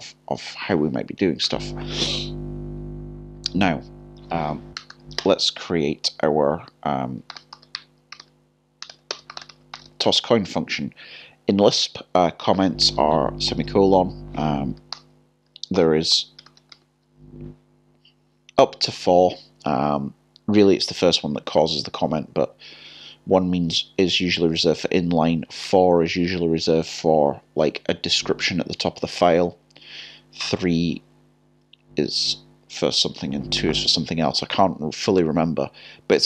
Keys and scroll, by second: 8.8 typing, 15.8 5.